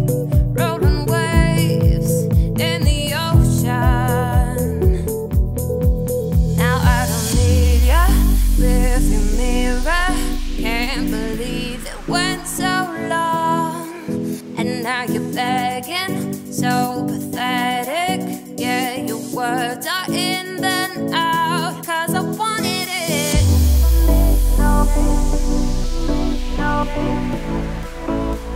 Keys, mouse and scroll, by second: 0.1 s, 1.6 e, 3.4-4.2 scroll up 3, 4.2 g, 5.5 a, 6.0 s, 7.2 middle click, 7.5 s, 9.5 ctrl+r, 10.3-10.9 scroll up 2, 10.9-12.7 middle drag, 12.7 g, 14.0 z, 14.3 click, 14.5 z, 15.2 g, 17.6 z, 18.0 click, 18.3 z, 18.8 g, 20.5 z, 21.7 click, 22.9 g, 25.3 z, 26.5 click, 27.2 g.